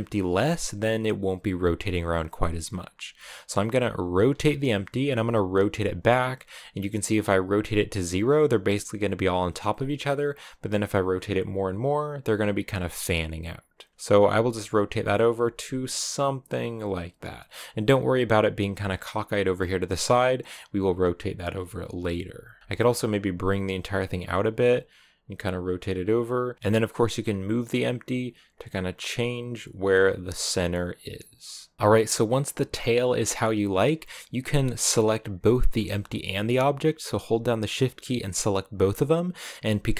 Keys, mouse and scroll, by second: 3.9 r, 13.9 s, 14.1 r, 14.8-15.2 scroll down 2, 15.2 r, 21.5 r, 22.6 g, 24.1 r, 26.5 g, 31.7-34.6 shift+middle drag, 34.6 right click, 35.5-37.5 scroll up 2, 37.5-38.6 shift+right drag, 38.6-39.5 scroll down 2, 39.5 g.